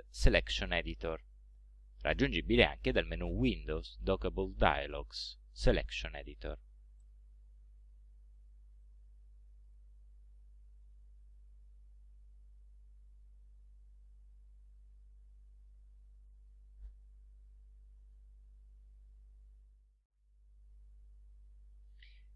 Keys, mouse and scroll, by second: 7.1 click, 8.9-9.9 drag, 11.1-12.3 drag, 13.7-16.8 drag, 21.1 click, 21.9-22.3 drag.